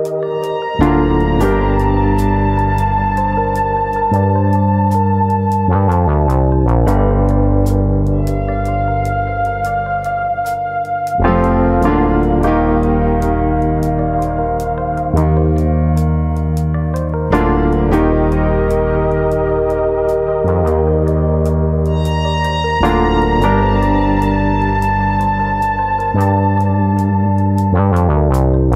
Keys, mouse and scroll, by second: 1.0 r, 2.2 click, 2.9 ctrl+z, 3.6 r, 4.6 click, 5.0 click, 5.9 middle click, 7.0-7.5 scroll up 2, 8.6 3, 9.1 click, 9.5 middle click, 10.5 ctrl+click, 10.8 middle click, 11.9 ctrl+click, 12.2 middle click, 12.7 ctrl+click, 13.1 middle click, 13.8 shift+middle click, 14.0 middle click, 18.4 shift+d, 19.8-20.5 scroll up 1, 20.5 KP_1, 21.1 scroll up 2, 21.4 shift+middle click, 22.0 alt+click, 22.8 ctrl+KP_Add, 24.1 click, 25.5 ctrl+KP_Add, 26.1 ctrl+KP_Subtract, 27.2 click.